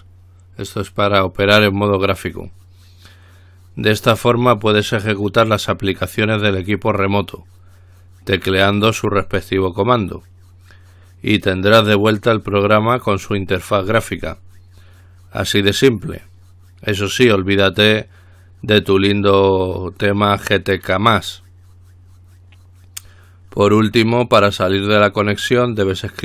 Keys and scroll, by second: 2.4 typing.